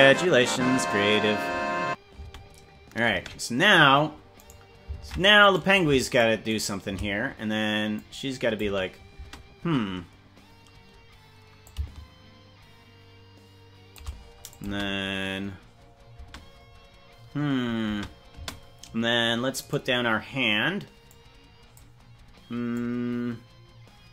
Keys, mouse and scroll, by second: 2.2 space, 3.2 space, 4.6 right click, 5.0 ctrl+Tab, 5.6 right click, 6.2 shift+right click, 6.6 right click, 7.9 click, 8.6 space, 9.2 space, 11.6-13.9 shift+drag, 14.5 click, 14.7 space, 16.1 space, 17.9 space, 18.3 space, 19.7 right click, 21.1 click, 22.7-24.1 drag.